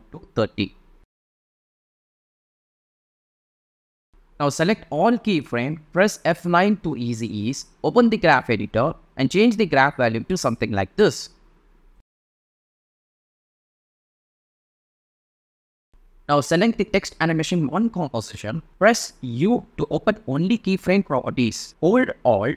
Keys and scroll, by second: 5.1 F9, 13.2 space, 15.7 space, 18.8 u.